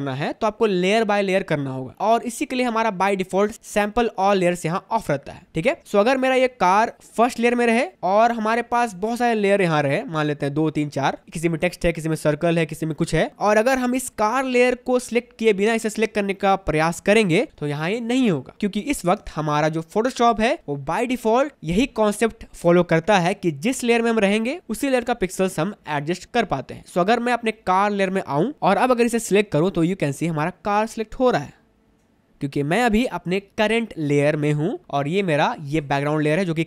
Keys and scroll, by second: 5.8 space, 11.2 space, 13.3 space, 18.5 space.